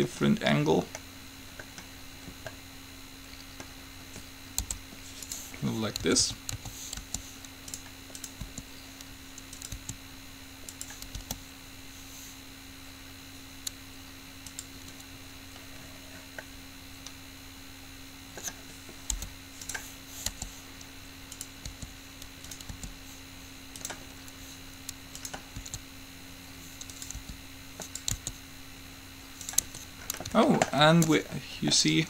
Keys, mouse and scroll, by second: 4.8 u, 6.2 a, 6.4 a, 6.7 a, 7.2 g, 8.7-10.2 drag, 8.7 r, 9.9 s, 11.4 g, 16.7-19.3 middle drag, 19.3 u, 20.5 g, 21.9 r, 22.9 g, 25.5-27.2 drag, 25.7 s, 27.3 r, 28.2-29.9 drag, 28.4 s, 29.8 Tab.